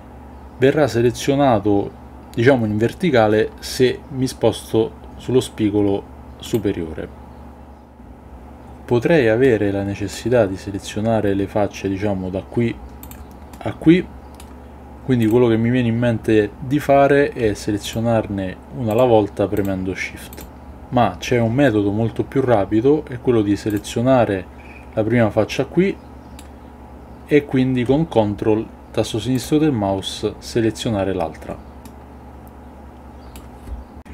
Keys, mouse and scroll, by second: 9.4-10.1 middle drag, 13.5-14.3 middle drag, 25.5-26.4 middle drag, 29.3 ctrl+click, 31.9-33.3 middle drag.